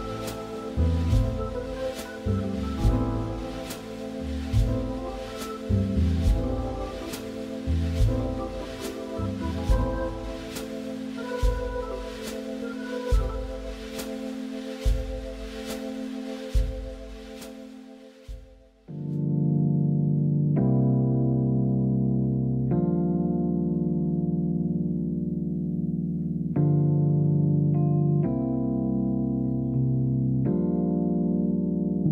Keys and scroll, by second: 2.1 Escape, 9.5 Escape, 14.2 Escape, 23.5 Escape, 25.0 Escape.